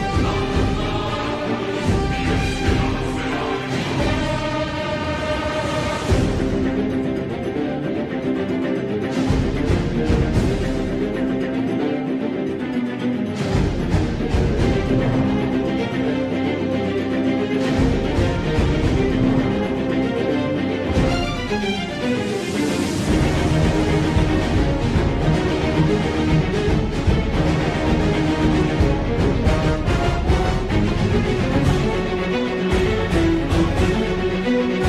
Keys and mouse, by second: 1.1 3, 1.4 middle click, 2.8 click, 4.0 KP_7, 6.3 s, 10.2 2, 14.7 s, 21.3 s, 25.8 s, 32.4 s.